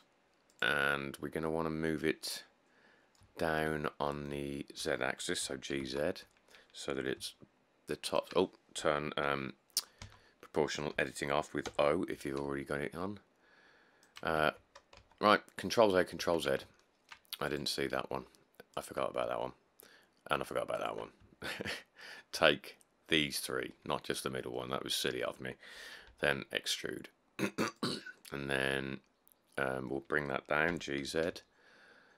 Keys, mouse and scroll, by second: 5.6 g, 6.0 z, 10.2 o, 11.9 g, 12.4 z, 14.8 ctrl+z, 15.2 ctrl+z, 16.4 ctrl+z, 26.3 e, 30.9 g, 31.2 z.